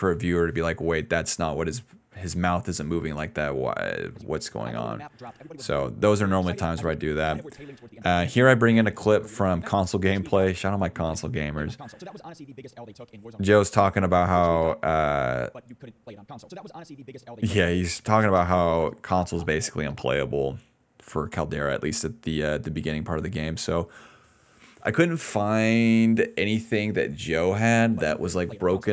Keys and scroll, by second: 3.3 d, 4.1 space, 4.4 d, 5.8-8.4 typing, 10.4-11.7 typing, 13.3-16.0 typing, 17.7 space, 22.2-23.3 typing, 23.7 Return, 27.7 space.